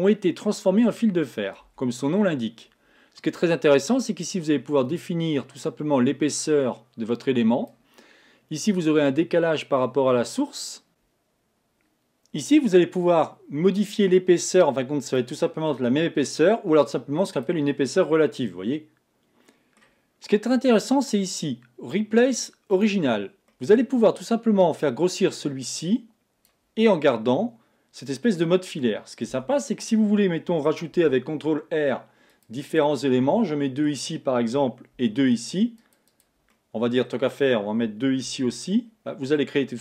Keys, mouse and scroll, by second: 1.8 Tab, 4.3-7.3 drag, 9.3-10.9 drag, 15.1 click, 17.4 click, 18.1-21.1 middle drag, 22.9 click, 23.5-25.2 middle drag, 25.2-26.9 drag, 26.9-29.4 middle drag, 29.4 Tab, 31.1 ctrl+r, 33.2 middle click, 34.0-35.0 scroll up 1, 35.0 ctrl+r, 36.6-38.3 middle drag, 38.3 ctrl+r.